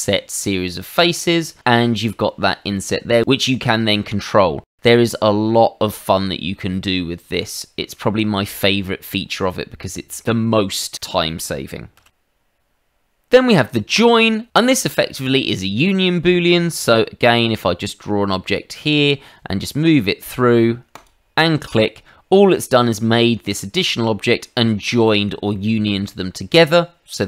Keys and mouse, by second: 6.7 middle click, 9.4 middle click, 12.0 ctrl+z, 13.9 click, 16.3 middle click, 17.3 click, 20.9 click, 21.7 middle click, 22.5 shift+middle click, 23.2 middle click, 24.8 shift+middle click, 25.5 middle click.